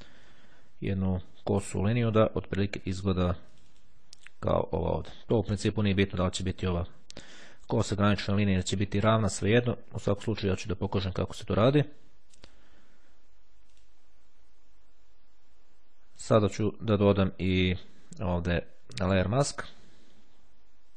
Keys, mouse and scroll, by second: 2.6 click, 3.7 click, 12.6 click, 13.8 click, 16.0 right click, 19.5 click.